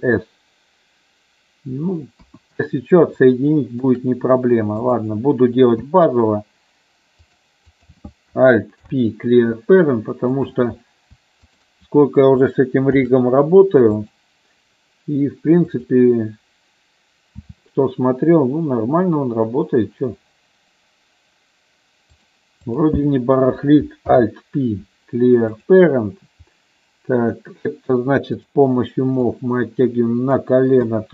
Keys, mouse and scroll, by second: 2.3 KP_1, 3.5 shift+middle click, 5.0 click, 5.9 e, 7.9 click, 9.0 alt+p, 11.5 shift+click, 13.1 ctrl+p, 15.9 click, 17.5 e, 22.2 click, 22.7 click, 24.3 alt+p, 29.4 click, 31.0 KP_3.